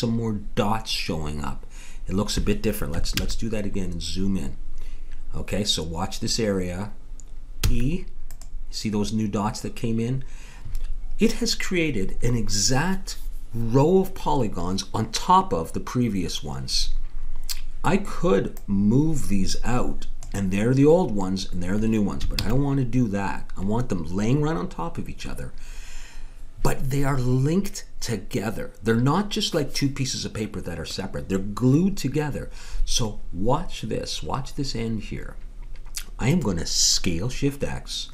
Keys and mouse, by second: 3.2 ctrl+z, 7.6 e, 17.4-18.5 middle drag, 18.5-20.4 drag, 22.4 ctrl+z.